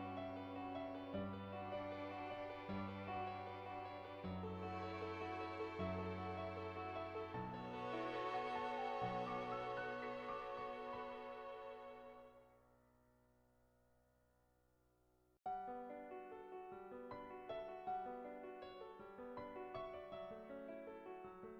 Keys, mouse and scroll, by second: 0.2 shift+middle click, 0.7 shift+middle click, 1.6 shift+middle click, 3.2 Tab, 3.6 Tab, 4.8 shift+s, 5.5 Tab, 6.0 click, 7.0 ctrl+z, 7.0 click, 7.7 click, 8.0 ctrl+z, 8.2 click, 9.2 ctrl+z, 9.5 click, 10.0 click, 10.5 click, 11.0 click, 12.0 click, 12.4 ctrl+z, 12.5 click, 13.1 click, 13.9 ctrl+z, 14.4 click, 15.1 click, 15.5 ctrl+z, 15.7 click, 16.0 click, 16.7 middle click, 17.5 shift+middle click, 17.9 middle click, 18.3 ctrl+z, 18.8 click, 20.2 click, 20.9 ctrl+z, 21.0 click.